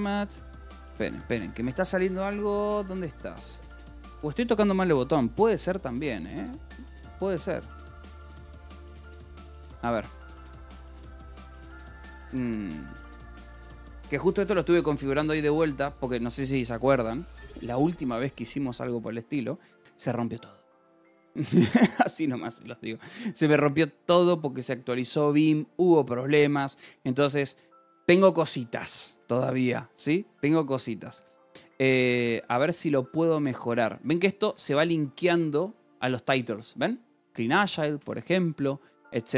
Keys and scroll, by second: 0.4 Escape, 0.8 space, 8.1 c, 9.0 Escape, 10.2-12.9 typing, 14.3 Escape, 14.7 space, 29.6 f, 31.1 Escape, 31.2-32.5 typing, 34.3 v, 34.9 e, 37.6 Escape, 38.4 ctrl+s, 39.0-39.3 typing.